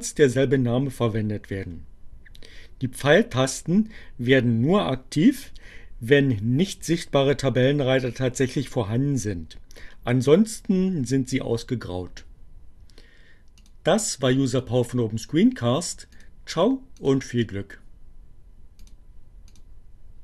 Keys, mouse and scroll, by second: 13.2-14.3 drag, 15.9 click, 16.6 click, 18.6 click, 19.5 click.